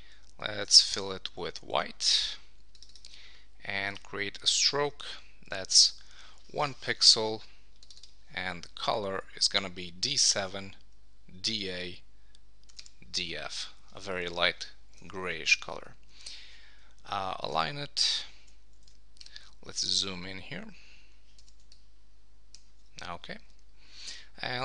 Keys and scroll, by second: 1.5 super+BackSpace, 13.9 Return, 16.3 super+a, 18.4 super+d, 18.8 super+1, 24.1 super+s.